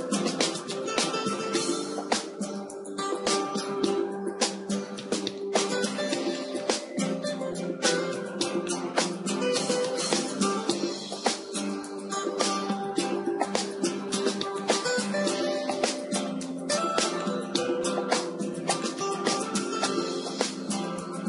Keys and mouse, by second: 1.0 shift+a, 15.9-21.2 drag.